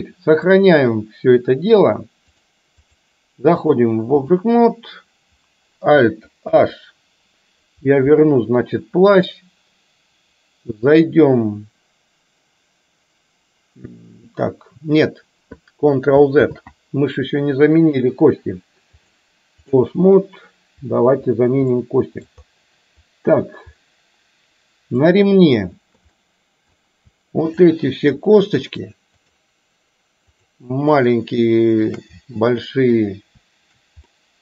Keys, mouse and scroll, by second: 0.0-0.5 shift+middle drag, 2.5 click, 3.6 click, 6.6 alt+h, 16.5 ctrl+z, 19.1-19.9 drag, 21.8 middle click, 25.1 click, 26.1 middle click, 27.5 shift+click, 28.3 shift+click, 31.9 shift+click, 32.5 middle click, 34.3-34.4 drag.